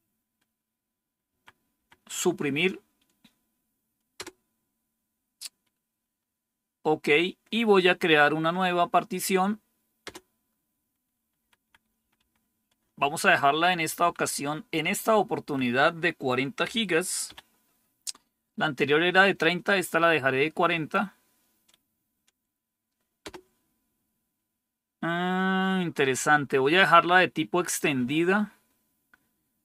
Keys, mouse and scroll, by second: 1.2 Left, 1.7 Left, 4.1 Return, 9.9 Return, 11.3 Left, 11.5 Left, 11.7 Left, 11.9 Left, 12.1 Left, 12.7 Left, 13.7 Delete, 14.1 Delete, 14.2 Delete, 14.6 Delete, 15.3 Delete, 16.5-17.2 typing, 23.1 Return.